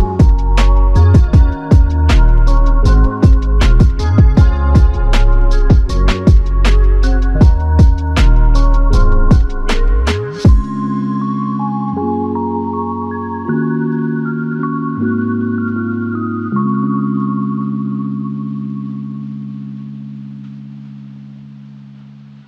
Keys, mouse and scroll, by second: 3.3 click, 3.6 alt+click, 7.9 alt+shift+click, 8.6 alt+click, 11.1 double click, 16.4 f, 18.5 alt+click, 20.0 alt+click.